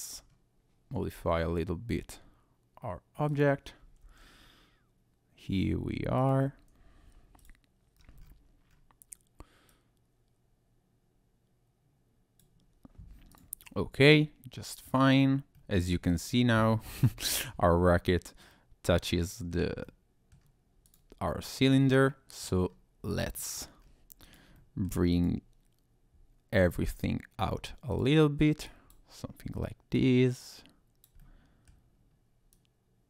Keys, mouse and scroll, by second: 0.1-1.1 scroll down 2, 1.1 r, 3.3 ctrl+click, 4.0 g, 6.2 click, 7.4 click, 8.0-9.0 scroll up 6, 9.7 click, 13.3 click, 13.6-14.2 scroll down 2, 14.2 middle click, 14.9 scroll down 2, 15.5 middle click, 16.1-16.5 scroll down 1, 17.6 middle click, 19.8 middle click, 20.8 click, 21.4 middle click, 22.7 scroll down 1, 23.1 click, 23.3 middle click, 23.8-24.2 scroll up 1, 24.2 click, 24.6 middle click, 25.1 click, 27.9 click, 28.6 click, 29.9 click, 31.2 middle click, 31.9-32.4 scroll down 1, 32.5 click.